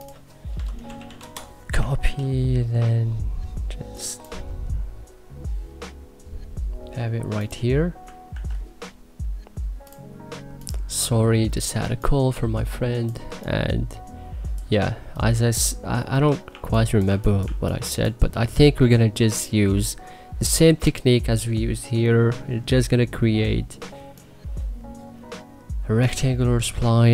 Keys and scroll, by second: 0.0-1.2 typing, 1.7 ctrl+s, 8.0 ctrl+s, 11.6 3, 16.3 2, 16.9 1, 17.3 2.